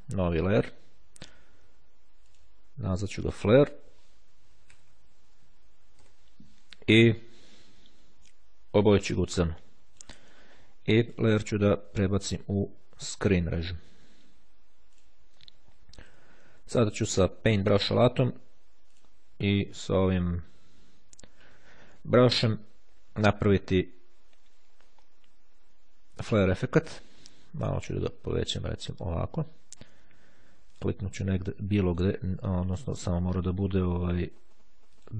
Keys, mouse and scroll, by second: 0.4 click, 2.4 click, 3.2 click, 4.0-5.2 typing, 9.4 click, 11.2 click, 15.0 click, 17.5 click, 19.0 click, 26.8 ], 30.5 click, 34.5 ctrl+z, 34.9 click.